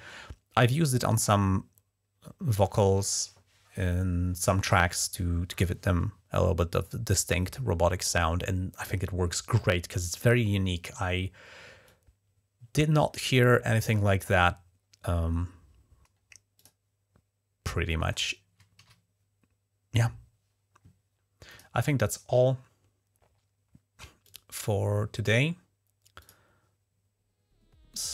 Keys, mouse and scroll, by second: 11.6-12.8 drag, 13.6 click, 16.4 click, 18.6 ctrl+s, 21.3 click, 24.0 click, 26.0 click.